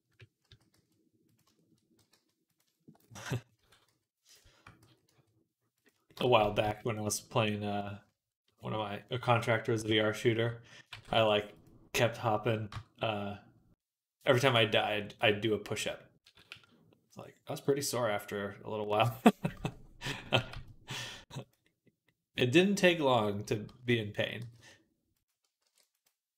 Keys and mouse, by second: 0.3 s, 1.8 g, 2.9-7.9 drag, 3.4 s, 4.6 s, 6.2 s, 7.9 right click, 8.2 click, 8.3-9.3 right drag, 9.3 click, 9.6 KP_3, 10.8 g, 12.6 Tab, 15.8-24.2 drag, 16.1 s, 19.4 ctrl+z, 20.2 g, 23.5 ctrl+z, 24.2 g, 25.5 ctrl+r.